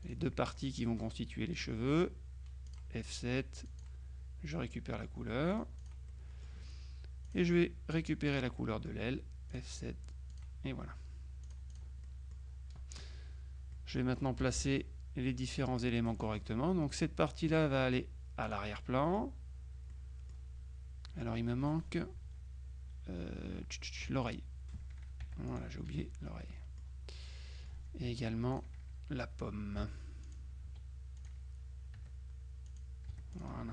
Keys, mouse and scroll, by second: 0.1 shift+click, 2.7 click, 3.7 click, 5.6 click, 6.2 middle click, 6.2 right click, 7.3 click, 8.4 click, 8.7 middle click, 9.6 click, 10.4 click, 11.5-12.4 drag, 13.8 click, 14.5 KP_Subtract, 15.7 click, 17.0 click, 18.5 click, 19.4 middle click, 20.0 middle click, 21.1 middle click, 24.1 F2, 24.4 click, 25.3 F7, 25.6 click, 26.2 F1, 26.5 middle click, 27.6 click, 28.1 F2, 28.6 click, 29.9 F7, 30.3 click, 30.7 F2, 31.3 click, 32.1 F7, 32.7 click, 33.2 F1, 33.4 click.